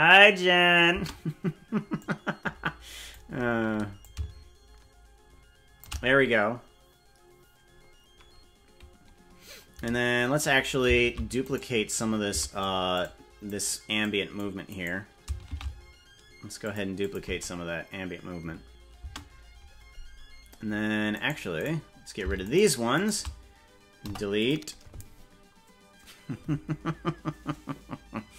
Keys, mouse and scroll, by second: 1.0 space, 2.0-3.1 drag, 4.0-5.8 drag, 11.6 right click, 12.4 c, 15.6 shift+d, 17.0 click, 17.4 space, 19.2 space, 21.2 right click, 21.6 right click, 23.0 shift+right click, 24.2 Delete.